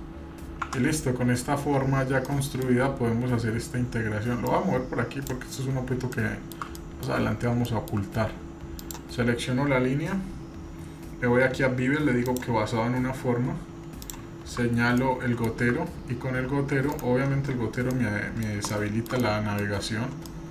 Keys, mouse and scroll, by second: 0.6 Tab, 2.3-3.1 middle drag, 4.4 click, 5.5 scroll up 2, 6.1-6.5 shift+middle drag, 6.7 middle click, 7.2 scroll up 1, 7.6-8.0 shift+middle drag, 8.1-8.8 scroll up 2, 8.8 click, 10.4-11.1 scroll down 2, 11.1 scroll down 1, 12.3 click, 14.0 click, 17.9-18.4 middle drag, 18.5 scroll down 1, 18.7-19.1 shift+middle drag, 19.2 middle click, 19.8-20.4 scroll down 3, 20.3-20.5 middle drag.